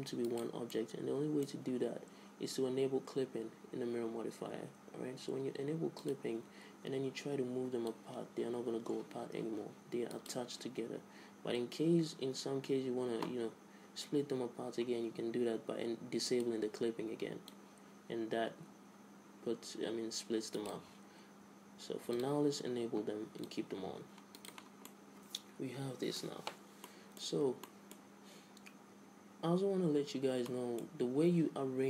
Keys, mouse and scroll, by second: 0.2 click, 0.9 middle click, 6.2-10.0 drag, 7.0 Tab, 7.4 Tab, 16.5-19.6 drag, 22.4-25.3 drag, 25.3-29.8 middle drag, 30.7-31.8 middle drag.